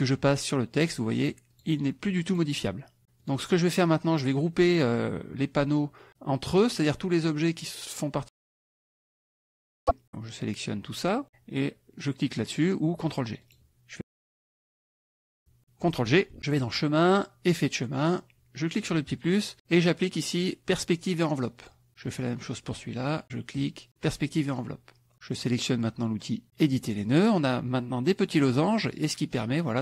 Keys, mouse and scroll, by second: 0.8 click, 1.5 click, 2.4 click, 3.2 click, 4.2 click, 7.2-11.2 drag, 13.4 click, 16.6 click, 17.4 click, 18.8 click, 21.6 click, 22.0 click, 23.2 click, 24.6 click, 26.7 click, 27.1 click, 28.2 click.